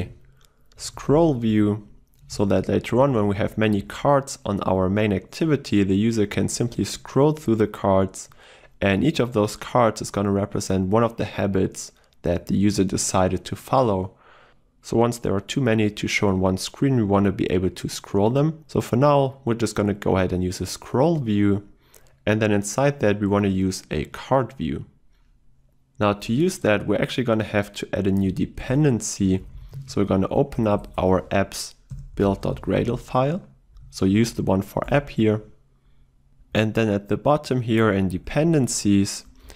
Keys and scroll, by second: 2.5 Return, 28.7 ctrl+shift+super+n.